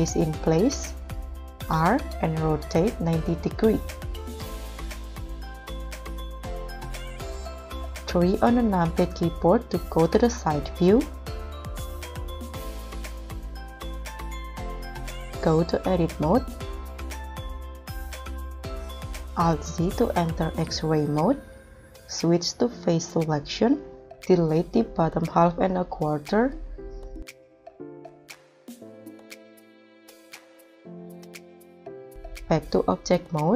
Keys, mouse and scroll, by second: 1.6 r, 4.1 KP_Subtract, 4.5 0, 5.2 Return, 7.6 3, 12.1 right click, 16.9 scroll down 2, 17.3 scroll up 2, 19.1 alt+z, 28.9 Delete.